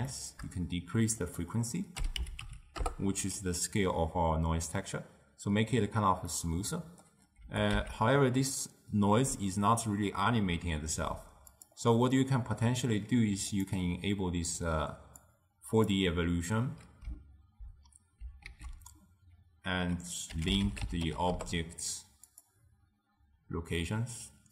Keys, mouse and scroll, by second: 1.3-4.3 drag, 6.4-7.5 middle drag, 7.5 g, 12.2-13.8 middle drag, 13.8 click, 15.4-18.4 drag, 18.5 ctrl+a, 22.1-23.8 middle drag.